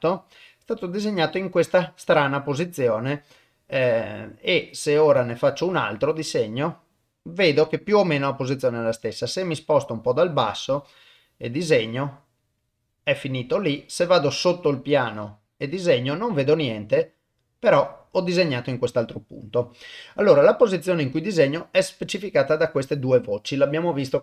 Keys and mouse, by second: 3.3-4.7 middle drag, 5.2 click, 6.4-10.0 middle drag, 10.5 click, 11.7-14.1 middle drag, 14.7-15.9 drag, 16.8-18.8 middle drag.